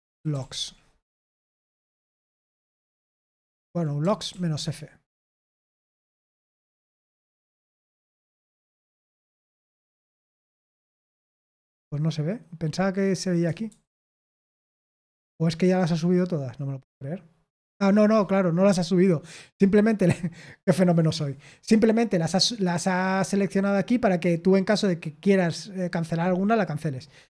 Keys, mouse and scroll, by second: 0.0-1.0 typing, 1.0 Return, 2.5 Return, 3.5 ctrl+p, 3.9-4.8 typing, 5.7 Return, 13.6 super+7, 14.0 super+8, 16.2-17.7 scroll up 3, 17.7-20.5 scroll down 2, 22.6-24.0 scroll up 2, 24.0-25.6 scroll up 1, 26.1-27.2 scroll down 2.